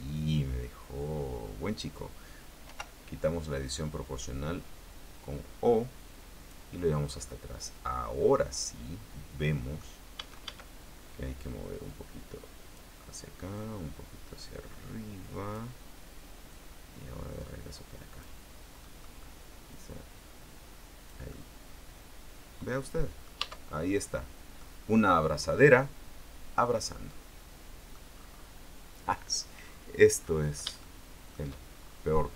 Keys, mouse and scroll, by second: 2.8 o, 3.8-6.8 drag, 6.8-7.2 scroll down 2, 7.2-10.1 middle drag, 10.3 a, 12.0-13.1 drag, 13.7-15.8 drag, 16.6-18.6 drag, 18.7 scroll down 1, 19.0 middle click, 19.8-21.4 drag, 21.4-23.6 middle drag, 23.6 Tab, 24.0-24.8 scroll down 1, 24.8-28.2 drag, 29.7-30.4 scroll down 1, 30.4-30.8 scroll up 1, 31.0 shift+middle click, 31.9-32.3 shift+scroll down 3.